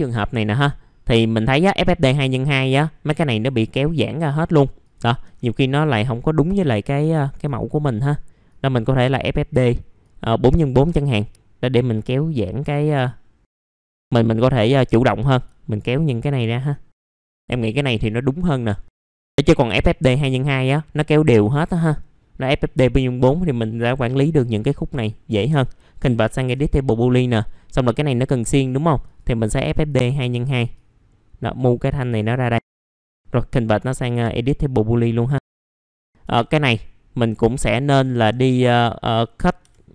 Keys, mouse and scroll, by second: 0.5 middle click, 4.8-16.4 drag, 16.4 click, 18.7 scroll up 1, 19.0 middle click, 27.2 middle click, 27.5 scroll down 1, 29.1 click, 30.7-32.7 drag, 32.7 click, 34.3 right click, 35.5 click, 35.7 alt+middle click, 36.0 scroll up 1, 36.2 F4, 36.8 alt+middle click, 37.6 alt+middle click, 38.8 alt+middle click, 39.3-39.6 scroll up 1, 39.6 F4.